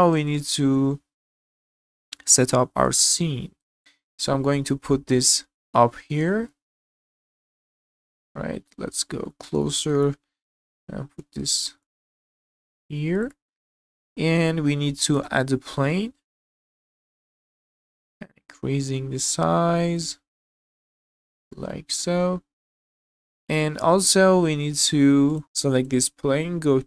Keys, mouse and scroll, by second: 0.0-0.4 scroll down 3, 0.4-1.5 middle drag, 1.8-2.1 shift+scroll up 1, 2.1 shift+middle click, 2.4 shift+scroll up 1, 2.8-3.7 drag, 4.5 g, 7.4-8.0 middle drag, 8.1-8.6 alt+middle drag, 8.7 scroll up 2, 9.0 shift+middle drag, 9.4 scroll up 2, 9.6-9.9 shift+middle drag, 9.6-9.9 shift+scroll down 1, 10.4 g, 13.5-14.0 scroll down 3, 14.0-14.7 middle drag, 15.1 shift+a, 17.2-17.6 scroll down 2, 17.7 shift+middle drag, 18.1 s, 20.3 scroll up 3, 20.7 shift+middle click, 21.1 scroll up 1, 21.3 shift+middle click, 21.6 middle click, 22.0 z, 22.4 scroll down 1, 22.6 shift+middle click, 22.9 middle click, 23.4 scroll down 1, 23.6-24.0 shift+middle drag, 24.3 middle click, 25.3 click, 25.8 click.